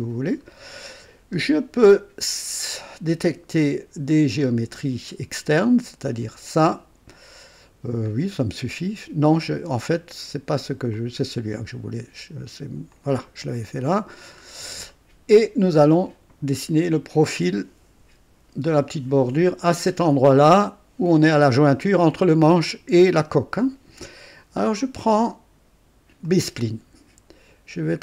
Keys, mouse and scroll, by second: 0.6 scroll up 2, 4.4 click, 6.4 click, 8.1-8.5 scroll down 2, 9.3-9.7 scroll up 2, 11.0 click, 12.9 click, 13.6 right click, 14.4 scroll up 2, 14.9 right click, 26.2 click.